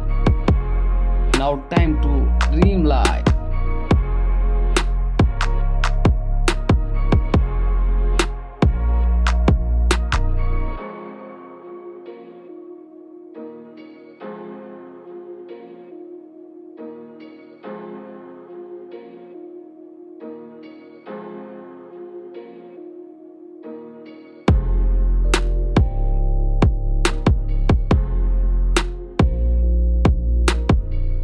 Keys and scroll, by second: 1.4 Return, 7.6 ctrl+i, 8.4-13.5 typing, 14.1 ctrl+s, 16.8 Down, 18.4 Return, 21.7 ctrl+i, 22.2 space, 27.8 ctrl+z, 29.5 ctrl+z, 29.8 [.